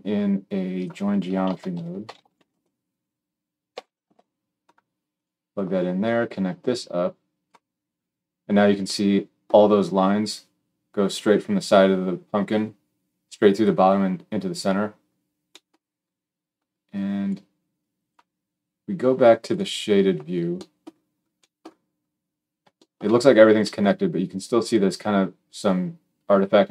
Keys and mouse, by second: 0.7-5.9 middle drag, 1.3 shift+a, 5.9-15.9 drag, 19.5-24.5 middle drag, 24.5 click, 24.6-26.7 middle drag.